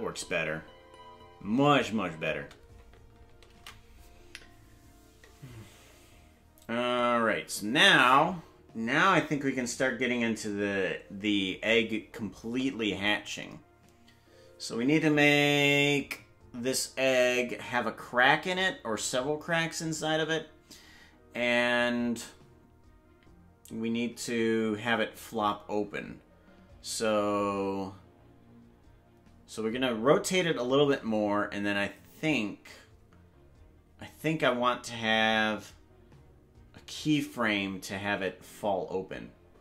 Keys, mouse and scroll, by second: 5.3 ctrl+s.